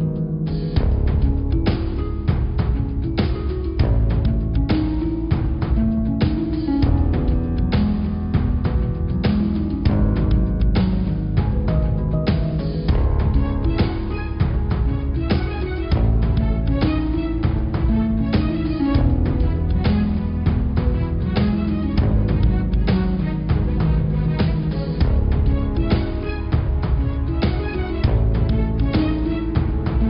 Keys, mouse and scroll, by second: 0.4 g, 2.2 click, 2.5 click, 3.0 Tab, 3.3 click, 3.9 shift+click, 4.2 shift+click, 4.9 g, 6.5 shift+click, 7.2 g, 9.6 click, 10.1 Tab, 11.1 click, 11.6-13.9 middle drag, 14.5 middle click, 14.7 click, 15.0 Tab, 15.2 click, 15.6 Tab, 16.4 middle click, 17.0 scroll up 1, 17.2-18.2 middle drag, 18.2 Tab, 19.0 s, 19.9 click, 20.1 Tab, 20.9 click, 21.2 click, 21.9 i, 24.9 click, 25.8 e.